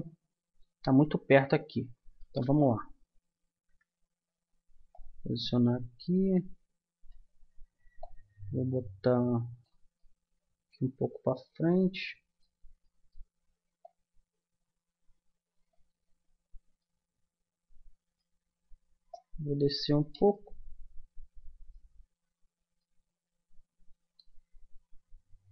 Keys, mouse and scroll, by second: 0.0 middle click, 2.2 KP_1, 8.0-9.6 drag, 10.0 middle click, 11.8 middle click, 13.8 click, 13.8-15.6 middle drag, 16.8 middle click, 19.1-20.3 drag, 20.3 middle click, 20.5 click, 20.9-25.3 middle drag.